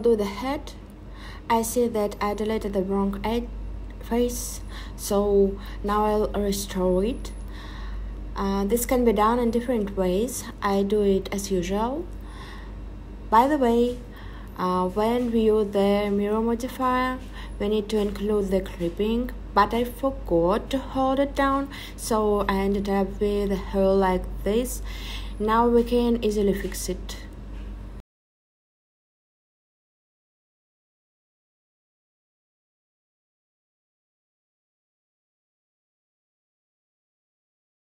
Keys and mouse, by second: 0.9 click, 1.6 e, 2.9 click, 4.4 click, 8.2 m, 9.0 click, 9.8 m, 13.0 middle click, 14.4 shift+click, 14.8 middle click, 15.9-16.5 drag, 20.9 click, 20.9 right click, 23.2 middle click, 26.9-30.7 drag, 31.6 click, 33.6 click, 37.1 click.